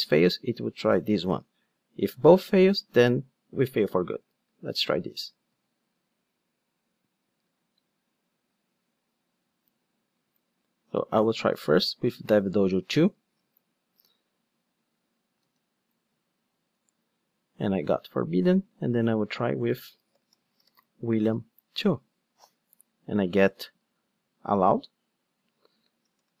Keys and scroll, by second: 5.6 ctrl+d, 11.3 super+c, 13.4 super+c.